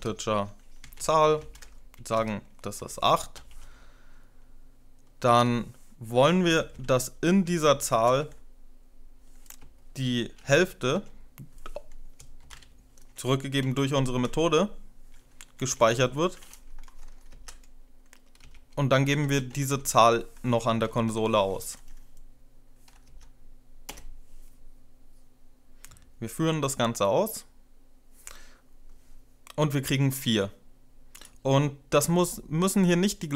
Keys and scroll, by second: 0.0-3.2 typing, 5.2 Return, 6.1-8.1 typing, 9.8-10.5 typing, 10.7 Tab, 11.9-13.7 typing, 14.1 Left, 14.4 Left, 15.1-16.3 typing, 17.3 End, 18.1 Return, 18.8-21.6 typing, 19.7 Tab, 22.9 End, 23.7 F5.